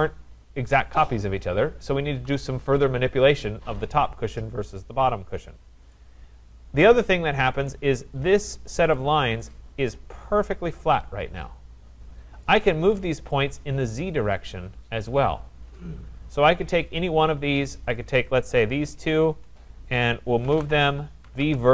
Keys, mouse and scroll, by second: 5.4-5.9 scroll, 6.8 right click, 7.1 scroll, 8.3 click, 12.5 right click, 16.4 click, 18.1 click, 18.9 shift+click, 20.1-21.7 typing.